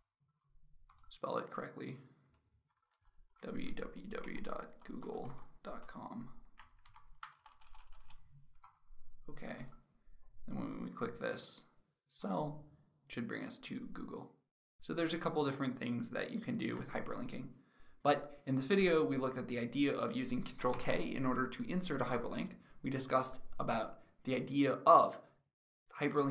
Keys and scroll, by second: 23.4 ctrl+k.